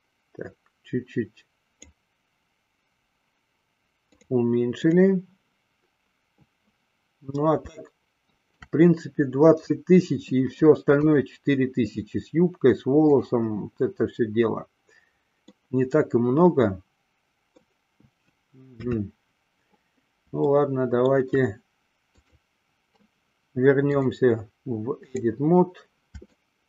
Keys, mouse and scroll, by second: 4.1-5.4 drag, 7.9-8.9 shift+middle drag, 11.2 click, 15.6-17.9 middle drag, 18.9 KP_3, 20.8-21.3 shift+middle drag, 22.3 click, 24.0-25.5 drag, 26.4 shift+middle click.